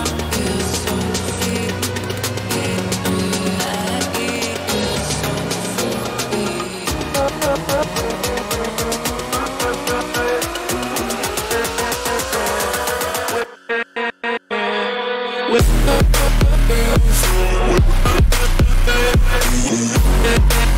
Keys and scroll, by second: 8.7 ctrl+i, 19.0 ctrl+=, 19.1 ctrl+=, 19.3-19.9 typing, 19.4 ctrl+=.